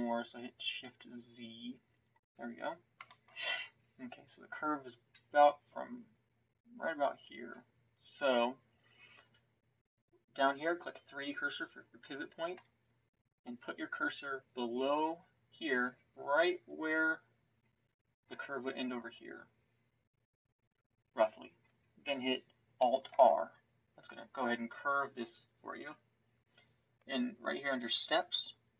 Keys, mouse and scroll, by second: 3.4-23.1 middle drag, 23.1 alt+r.